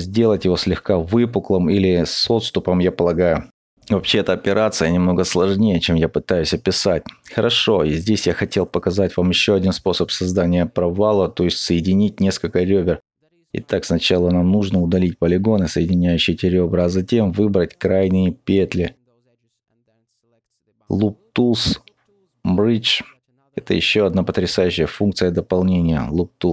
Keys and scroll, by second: 6.7 ctrl+alt+z, 8.1 ctrl+alt+3, 11.9-12.6 typing, 14.0 typing, 16.2 typing, 16.4 ctrl+alt+z.